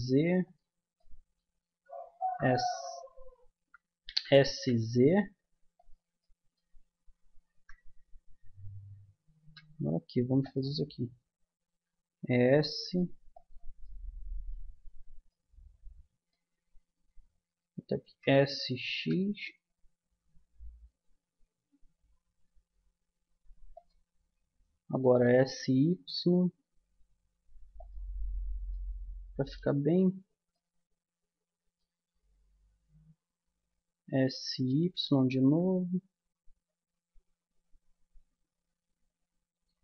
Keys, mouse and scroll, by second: 1.0-2.9 drag, 2.2 z, 3.6 z, 4.0 s, 7.5 KP_1, 8.1-10.4 middle drag, 9.4 g, 11.7 s, 13.8 middle click, 18.0 middle click, 18.0 s, 25.0 s, 28.2 middle click, 29.4-31.7 middle drag, 33.5 s.